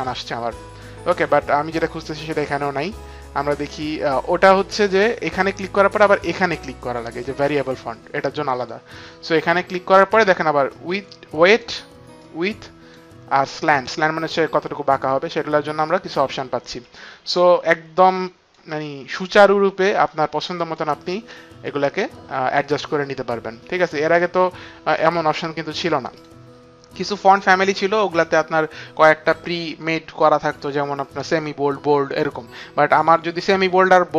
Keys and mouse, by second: 8.6 click, 10.7 click, 13.4 click, 16.8 click, 19.2 click, 21.7 click, 26.1 click, 27.0 click.